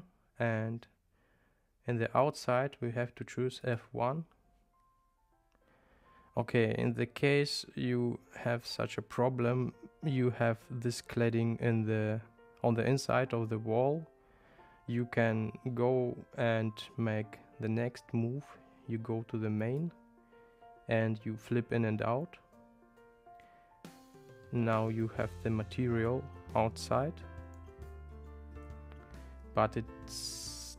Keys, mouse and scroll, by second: 2.2-3.9 drag, 19.7 click, 21.4 click.